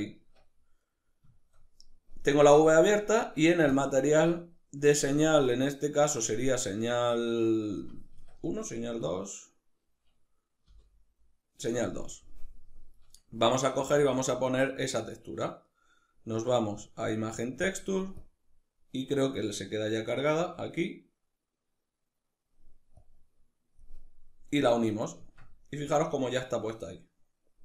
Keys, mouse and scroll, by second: 3.3 click, 5.7 click, 7.8 Tab, 8.7 right click, 10.3 l, 13.6 shift+a, 17.8-25.7 drag, 24.8 Tab, 25.7-27.6 middle drag.